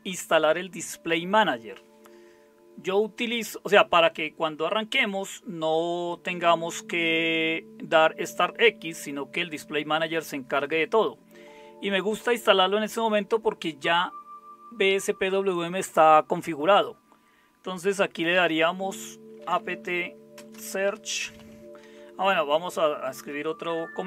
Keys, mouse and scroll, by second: 19.2-23.3 typing.